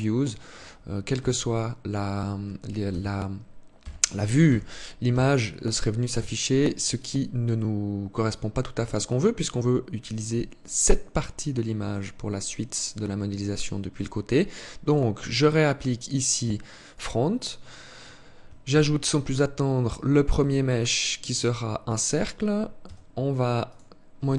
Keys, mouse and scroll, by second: 0.4 KP_1, 2.2 KP_1, 3.1 KP_3, 3.8 KP_1, 4.4 KP_3, 5.4 KP_1, 14.2 click, 18.0 shift+a, 22.2 t, 23.0 click.